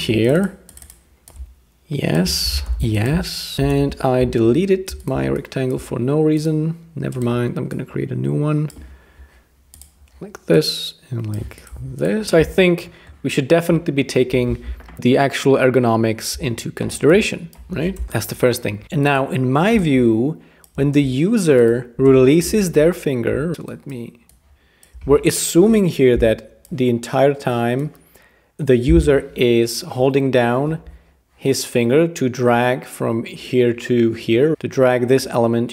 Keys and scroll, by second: 2.7 alt+super+], 2.8 k, 3.7 BackSpace, 18.0 BackSpace, 22.1 BackSpace, 25.6 Return, 28.6 Return.